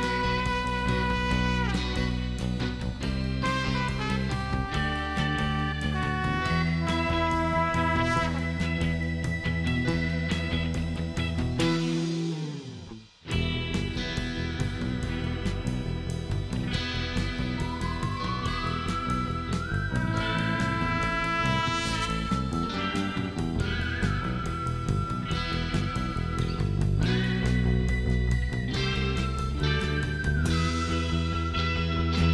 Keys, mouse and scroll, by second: 0.7 shift+right click, 1.5 shift+right click, 2.1 shift+middle click, 3.0 shift+right click, 4.7 scroll down 2, 5.6 shift+right click, 7.3 shift+scroll up 2, 8.1 scroll down 2, 10.3 scroll down 2, 10.7 middle click, 14.3 middle click, 14.5 scroll up 2, 15.3 middle click, 16.1 middle click, 17.4 shift+right click, 19.0 shift+right click, 20.1 shift+scroll up 1, 20.9 shift+right click, 22.6-22.9 shift+scroll up 2, 23.6 click, 24.2 middle click, 26.4 click, 28.3 ctrl+click, 30.6 click.